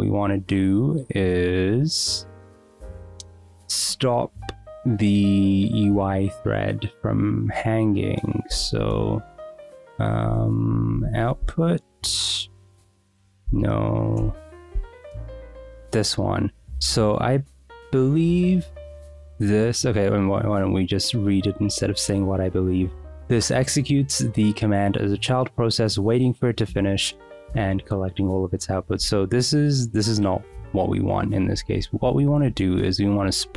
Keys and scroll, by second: 8.8-11.8 typing, 10.3 Escape, 11.8 Return, 13.4 n, 31.6-33.5 typing.